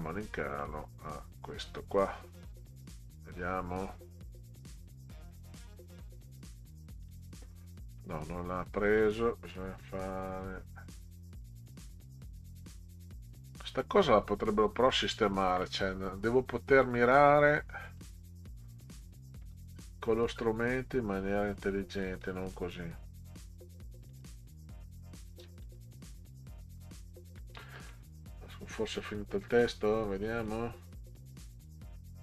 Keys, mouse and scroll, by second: 1.7 click, 3.3 scroll down 2, 3.8 scroll down 2, 5.2 click, 6.0 click, 7.0 click, 8.8 click, 11.4 click, 13.3 click, 14.0 scroll up 2, 14.5 middle click, 17.8 click, 18.7 middle click, 18.8 scroll up 2, 19.4-20.4 scroll down 8, 22.2 click, 24.1 click, 24.3 click, 25.6 click, 26.6 Delete, 26.9 Delete, 29.4 click, 30.3 click.